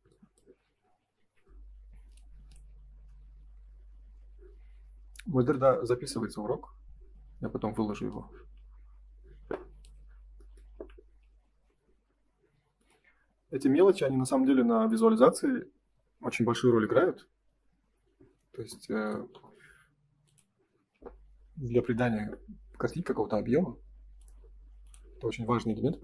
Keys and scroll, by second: 1.1 ctrl+s, 10.8 Escape, 11.4 ctrl+s.